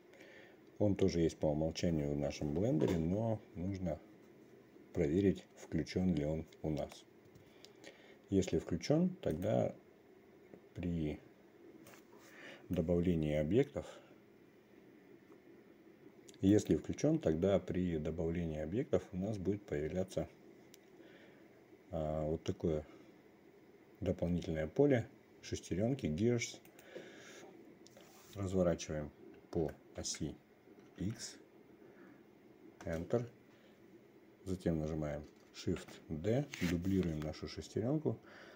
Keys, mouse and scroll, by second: 12.4-14.2 drag, 17.2-27.5 drag, 30.1 r, 36.3 shift+d.